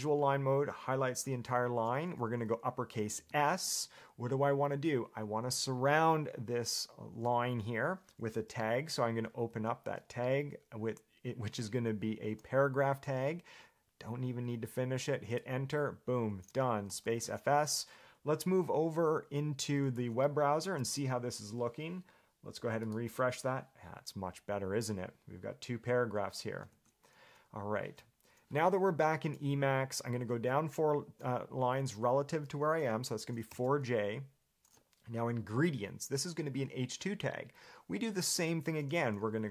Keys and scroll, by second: 9.7 shift+s, 12.5 p, 15.5 Return, 16.9 Escape, 33.5 4, 33.9 j.